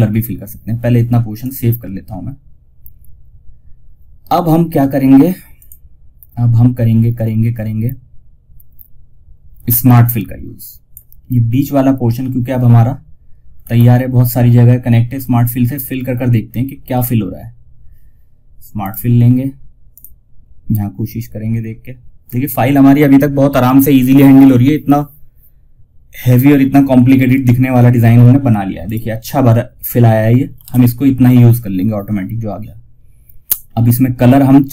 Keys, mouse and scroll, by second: 0.7 click, 4.9 click, 9.0 F2, 9.2-12.9 drag, 12.9-13.3 scroll up 2, 14.6-15.8 scroll down 1, 18.1 click, 26.6 alt+Num_Lock, 26.6 click, 28.1 click, 29.9 shift+F2, 32.9 scroll down 1, 34.2 click.